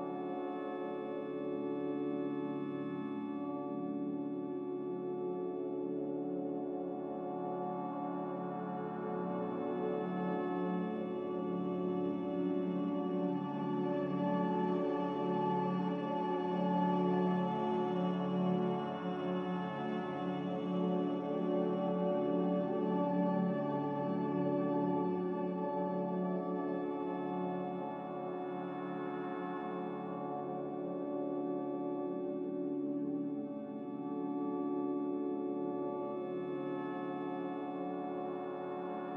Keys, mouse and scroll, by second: 7.1 Delete, 7.9 Delete, 11.2 z, 12.6-13.4 typing, 20.3 z, 23.9 5, 24.1 Return, 27.6 Return, 32.7 click.